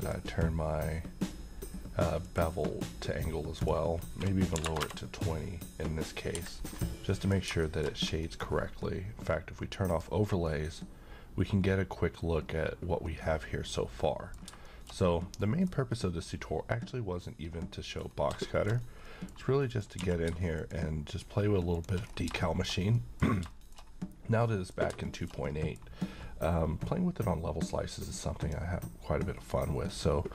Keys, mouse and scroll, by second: 0.0 click, 6.3 Escape, 6.5 scroll down 1, 7.1 middle click, 7.6 shift+middle click, 8.0 scroll down 1, 8.2 middle click, 9.9 click, 10.5-14.5 middle drag, 15.0-15.4 scroll down 1, 15.4 middle click, 15.7-16.2 scroll up 1, 16.2-18.1 middle drag, 18.0 scroll up 1, 18.5 shift+middle click, 18.8 scroll up 1, 19.0 middle click, 19.6 click, 20.0 q, 20.5 click, 21.7 shift+click, 22.1 scroll down 1, 22.4 middle click, 22.7-23.0 scroll down 1, 23.0 middle click, 23.8 shift+scroll down 1, 24.5-26.1 middle drag, 28.4 click, 29.9-30.3 middle drag.